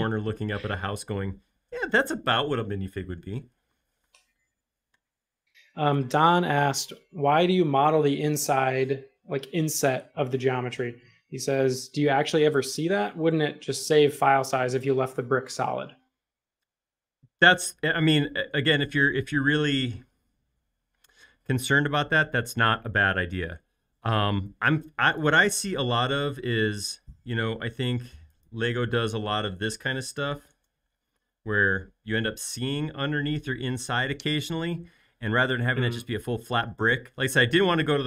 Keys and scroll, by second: 25.7 m, 30.1-31.7 typing.